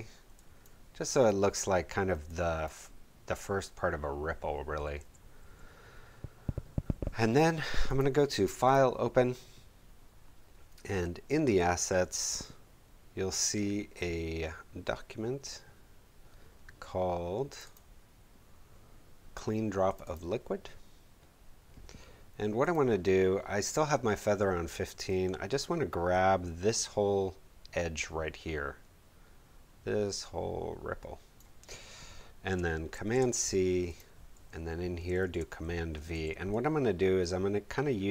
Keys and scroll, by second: 5.0 v, 32.9 super+c, 35.2 super+v.